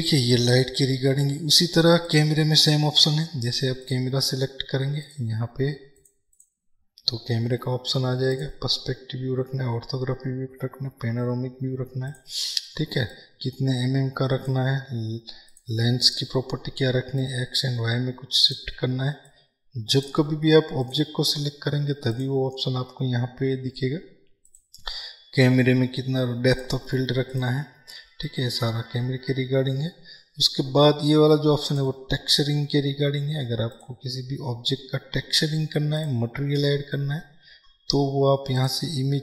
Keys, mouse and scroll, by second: 5.1 click, 13.2-20.9 drag, 36.1-39.2 drag.